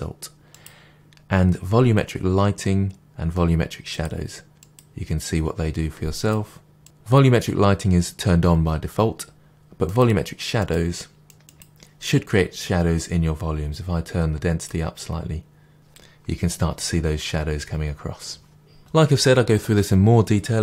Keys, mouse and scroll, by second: 0.9-2.1 scroll down 1, 3.9 click, 4.6 click, 6.2 click, 9.9 click, 10.6 click, 11.5 click, 14.6-20.6 drag, 15.7 Return.